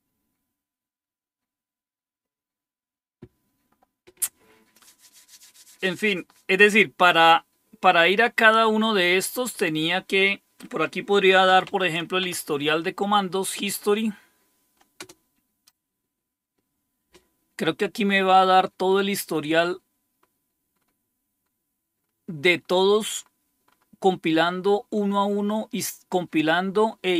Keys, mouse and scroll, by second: 11.0-12.1 typing, 12.2 Tab, 15.1 Return, 17.5-21.0 scroll up 1, 22.5 scroll up 1, 24.3-27.1 scroll up 1.